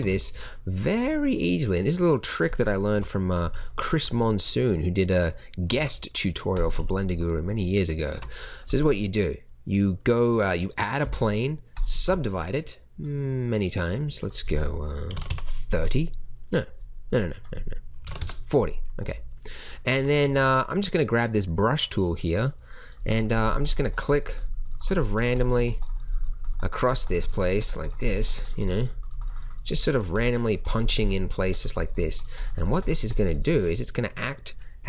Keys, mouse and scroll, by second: 2.9 KP_7, 5.7 shift+a, 8.0 Tab, 11.0 w, 12.0 t, 16.4-17.2 drag, 18.9 click, 19.0 t, 19.9 a, 20.2 c.